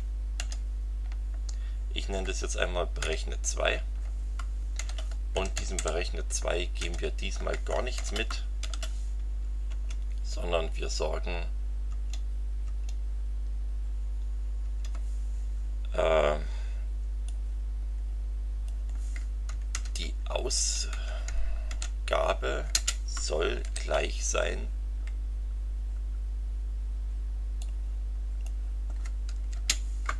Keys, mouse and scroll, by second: 0.0-0.3 typing, 3.0 2, 4.8-6.8 typing, 7.9 shift+9, 8.6 shift+., 9.7 Return, 11.8 Tab, 14.6 Tab, 17.2-18.8 drag, 19.7 ctrl+c, 20.0 ctrl+Down, 20.9 ctrl+Up, 21.7 ctrl+v, 22.7 space, 23.6 shift+0, 27.6 click, 29.5 space.